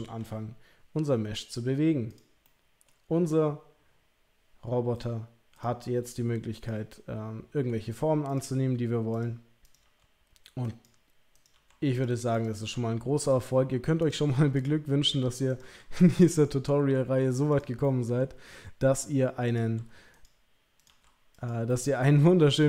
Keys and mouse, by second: 0.2 r, 2.1 click, 2.4 middle click, 3.1 r, 5.6 click, 6.0 r, 6.9 middle click, 8.3 click, 8.5 r, 9.8 r, 11.4 click, 11.5 r, 12.4 click, 12.5 r, 14.0 click, 14.1 r, 15.5 click, 15.6 r, 16.4 middle click, 17.8-18.2 middle drag, 18.4 r, 19.6 r, 20.8 click, 20.9 r, 21.7-22.4 middle drag.